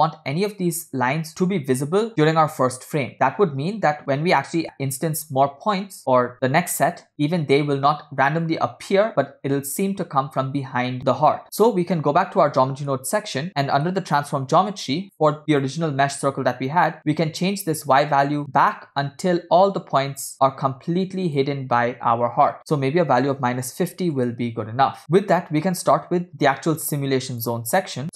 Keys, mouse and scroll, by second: 11.4-11.8 scroll down 5, 12.0-13.0 middle drag, 13.4 scroll up 1, 13.5 scroll down 1, 13.6 middle click, 14.0 scroll up 2, 15.6 click, 17.0-21.5 drag, 21.9 scroll up 3, 22.6-24.3 drag, 22.6 scroll down 2, 25.0 middle click, 25.0 scroll down 2, 25.3 scroll up 2, 25.7 middle click, 26.0 scroll up 2, 26.3-27.5 drag, 27.8 middle click, 28.0 scroll down 2.